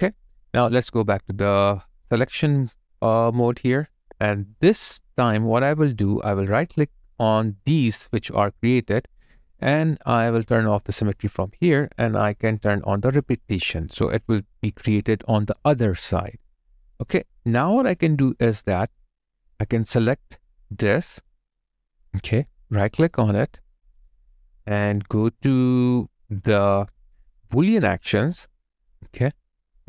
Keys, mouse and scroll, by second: 3.9 double click, 4.4 alt+right click, 5.1 alt+click, 5.6 alt+middle click, 6.1 alt+click, 7.3 alt+click, 7.4 alt+right click, 8.6 right click, 17.6 alt+click, 18.9 alt+right click.